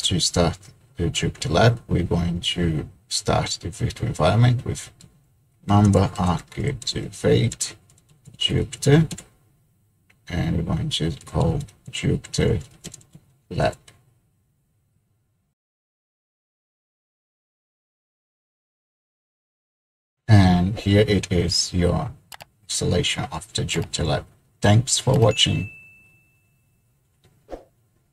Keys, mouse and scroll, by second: 4.9-8.9 typing, 9.1 Return, 11.0-13.6 typing, 15.5 click.